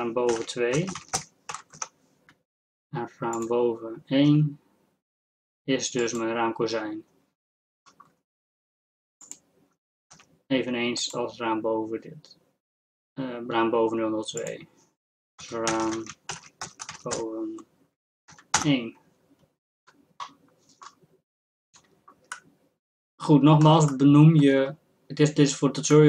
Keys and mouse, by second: 3.4-7.8 drag, 4.4 g, 7.8-9.2 middle drag, 9.2-13.9 drag, 10.4 g, 14.4-21.3 drag, 15.9 a, 21.3-26.0 middle drag.